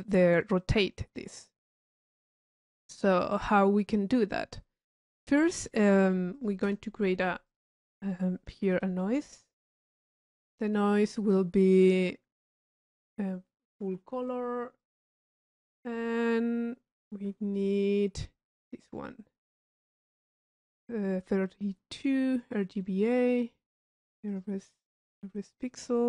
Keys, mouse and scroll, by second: 2.8-3.4 drag, 4.3 click, 5.1 middle click, 5.7-6.5 drag, 7.5 click, 9.2 i, 10.0-10.9 drag, 11.6 middle click, 13.0 click, 18.6 click, 19.6 click, 22.3 click, 24.3 click, 25.0 click, 25.4 click.